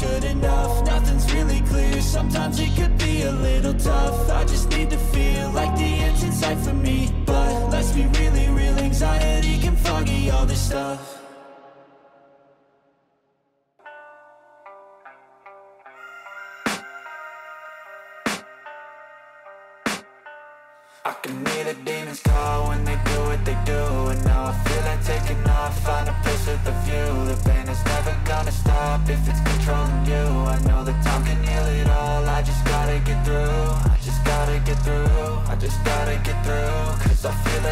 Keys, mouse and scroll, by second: 0.3 click, 0.3 shift+right click, 1.8 shift+click, 1.8 shift+right click, 2.7 shift+click, 2.7 right click, 3.5 shift+click, 3.5 shift+right click, 3.8 middle click, 4.2-4.5 scroll down 2, 4.2 g, 6.9 middle click, 8.1 middle click, 8.9 right click, 9.2 middle click, 10.2 shift+right click, 10.9 f, 11.0 middle click, 11.8 shift+right click, 12.1 middle click, 12.6 shift+right click, 12.9 middle click, 13.5 f, 13.9 middle click, 15.2-16.6 middle drag, 16.9-17.3 scroll down 2, 17.3 right click, 17.7 middle click, 19.8 click, 21.2 ctrl+middle click, 21.7-27.9 drag, 27.9 ctrl+z, 27.9 middle click, 28.3 e, 31.4 middle click, 32.6 click, 32.7 shift+middle click, 33.9 alt+right click, 34.8 click, 35.1-36.6 drag.